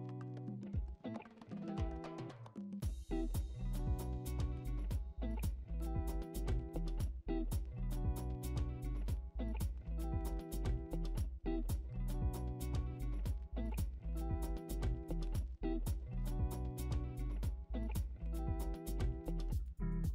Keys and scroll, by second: 3.0 ctrl+z, 12.7 ctrl+z, 14.6 ctrl+z, 17.7 ctrl+z, 20.0 ctrl+z.